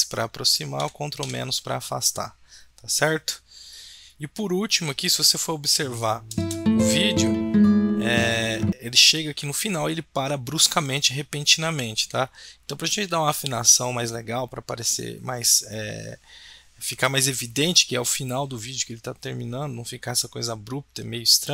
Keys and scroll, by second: 0.8 ctrl+-, 1.2 ctrl+-.